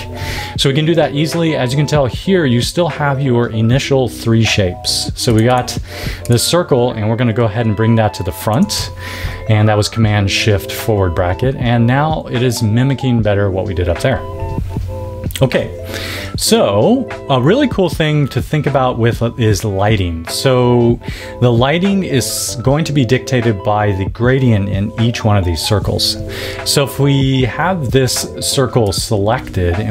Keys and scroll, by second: 8.5 shift+super+].